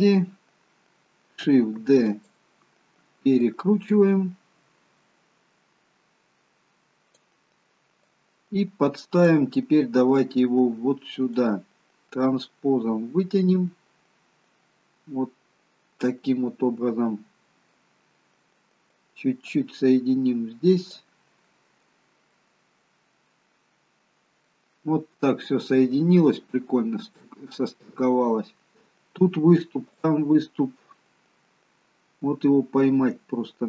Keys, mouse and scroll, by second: 0.6-1.3 scroll down 2, 1.8 shift+d, 3.5 click, 8.1 click, 10.2 click, 18.9 click, 21.6-22.1 scroll up 2, 22.5 middle click, 22.5-23.2 scroll up 1, 24.9-25.5 scroll up 2, 25.5 shift+middle click, 27.3-28.0 scroll down 1, 28.0 middle click, 30.1 click.